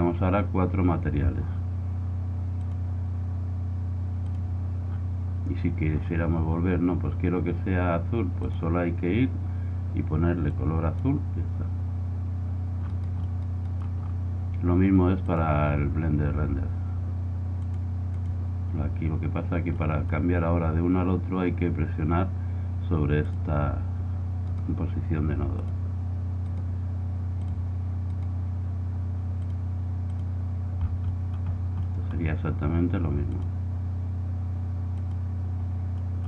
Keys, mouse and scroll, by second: 2.5-4.4 drag, 4.9-8.4 middle drag, 8.4-10.2 drag, 12.8-14.5 right drag, 14.5 middle click, 15.3-17.1 drag, 17.6-19.4 drag, 21.3-23.2 middle drag, 23.2-24.8 drag, 24.5 right click, 25.1 right click, 26.2 click, 29.2 click, 29.9-31.7 right drag, 31.7 click, 31.7-33.7 middle drag, 33.4-35.2 drag.